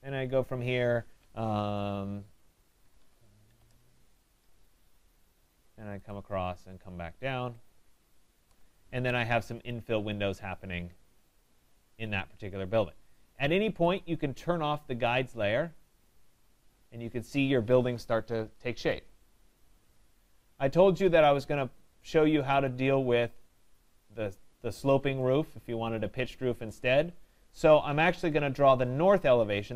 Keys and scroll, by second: 3.7 Return.